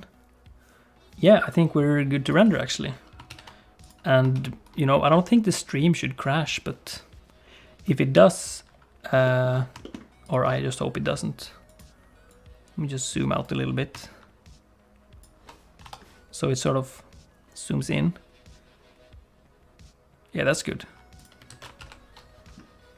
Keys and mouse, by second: 3.4 ctrl+s, 3.9 click, 4.4 ctrl+s, 5.7 click, 9.3 middle click, 9.8 shift+click, 11.8-13.4 drag, 14.1-15.3 shift+drag, 16.7-20.7 drag, 21.3 click, 21.5 alt+a, 21.8 ctrl+s.